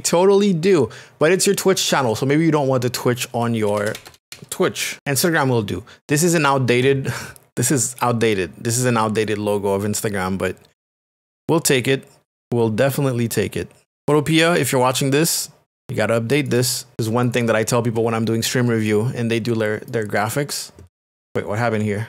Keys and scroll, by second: 3.7 BackSpace, 4.9 t, 11.1 shift+space, 14.6 space.